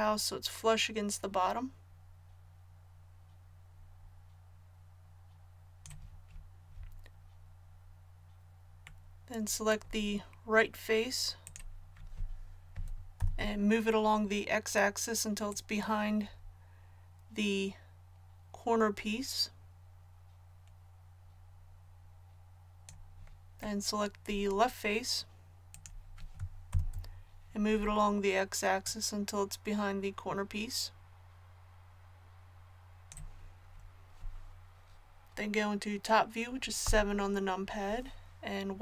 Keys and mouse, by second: 9.0-13.2 middle drag, 13.2 ctrl+KP_1, 23.9-26.7 middle drag, 26.7 ctrl+KP_1, 30.1 click, 36.8 KP_7.